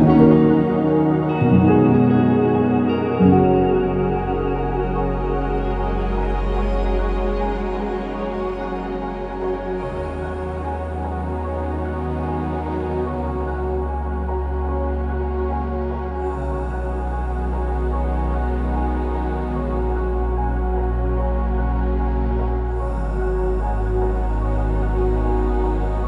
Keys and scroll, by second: 0.9 Escape, 8.8 Escape, 12.7 typing, 12.8 Return, 14.2 Escape, 15.3 typing, 15.3 Return, 17.2 ctrl+z, 17.5 Escape, 19.3-20.1 typing, 22.5 BackSpace, 22.7 BackSpace, 24.1-25.7 typing.